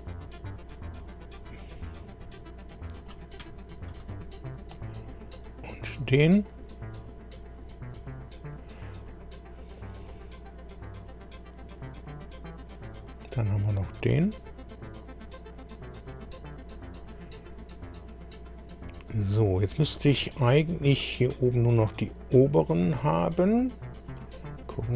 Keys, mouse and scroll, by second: 3.9 click, 5.3 click, 6.9 click, 8.3 scroll down 1, 11.9 click, 16.1 click, 18.6 scroll down 2, 19.3 scroll up 2, 20.5-20.8 scroll up 2, 22.5-22.8 scroll up 2, 23.0-23.6 scroll up 4, 24.1-24.4 scroll down 2, 24.7 scroll down 2.